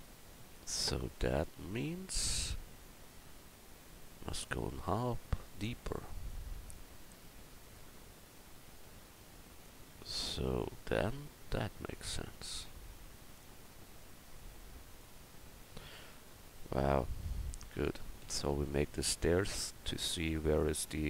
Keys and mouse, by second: 17.7 middle click, 18.5 KP_1.